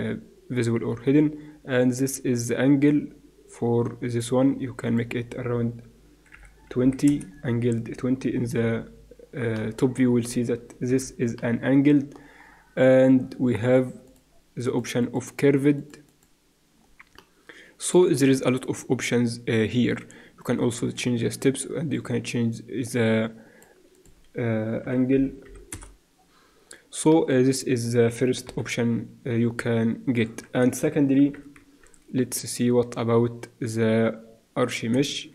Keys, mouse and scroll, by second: 1.8-3.7 drag, 4.8-8.2 drag, 8.3 KP_7, 10.9 KP_7, 14.1-17.2 drag, 17.2-20.1 middle drag, 21.9-23.9 drag, 25.4-26.8 drag, 27.1 middle click, 28.0 middle click, 28.4 KP_7, 31.2 shift+c, 31.6 shift+a, 35.1 shift+a.